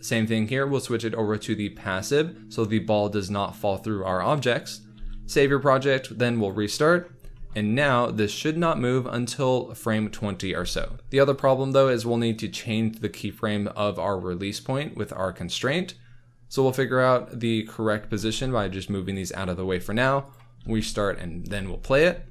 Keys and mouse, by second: 5.0 ctrl+s, 6.4-6.8 drag, 10.5 space, 10.8 space, 11.3 click, 17.7 drag, 18.1 g, 18.2 x, 20.6 ctrl+s, 21.5 space.